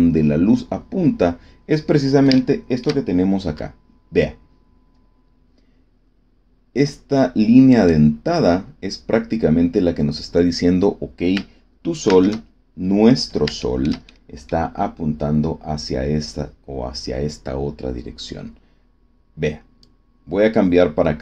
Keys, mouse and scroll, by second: 2.3-2.9 shift+middle drag, 7.7 click, 12.0 shift+c, 12.7-13.1 scroll up 2, 13.5-14.6 shift+middle drag, 19.7-21.2 drag.